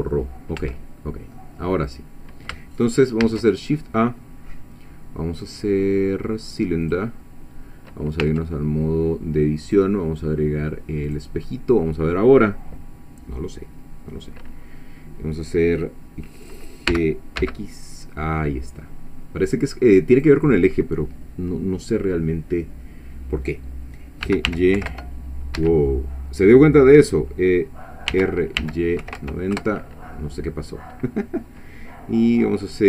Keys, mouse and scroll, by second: 0.6 Tab, 1.4 middle click, 2.0 click, 3.2 shift+a, 6.9 click, 8.2 Tab, 9.7 click, 11.1 click, 16.9 g, 17.4 x, 20.2 click, 24.3 g, 24.5 y, 24.8 9, 24.9 0, 25.6 Escape, 28.1 r, 28.6 y, 29.0 KP_9, 29.2 KP_0, 29.6 Return.